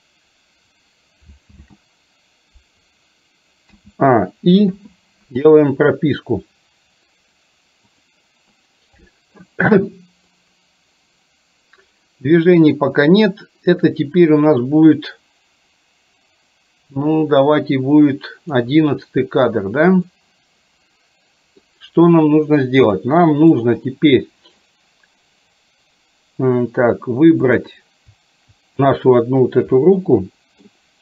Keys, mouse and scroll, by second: 1.6 ctrl+z, 3.8 a, 4.8 i, 10.4-18.8 drag, 20.3-21.6 middle drag, 23.1-23.8 middle drag, 30.0-30.6 middle drag.